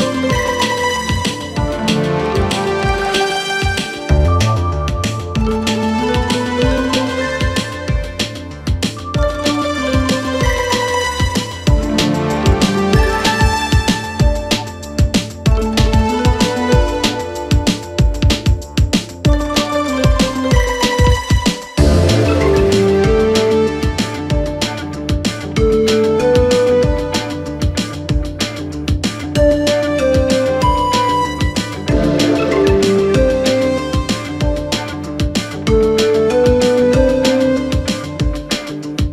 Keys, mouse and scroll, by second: 1.0-2.3 drag, 2.3-3.1 scroll down 3, 3.1 KP_1, 4.0-5.6 shift+middle drag, 5.6-6.4 scroll up 2, 7.8 click, 8.5 click, 8.8-11.7 scroll up 2, 11.8 Tab, 12.4 2, 13.1 click, 13.6 click, 13.7 click, 14.6 ctrl+KP_3, 16.1 KP_Divide, 16.8-17.5 scroll up 1, 17.5-18.3 middle drag, 18.3-19.0 scroll up 2, 19.0 e, 21.2 e, 22.9 s, 24.6-27.5 middle drag, 27.5 click, 28.8 e, 33.2-34.7 middle drag, 34.7 ctrl+f, 35.9-37.3 middle drag, 37.3 ctrl+r.